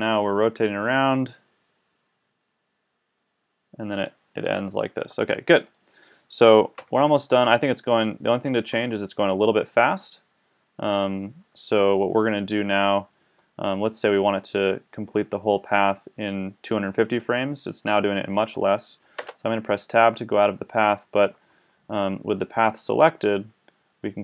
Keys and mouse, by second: 5.7 middle click, 6.8 KP_1, 12.5-14.8 drag, 19.2 Tab.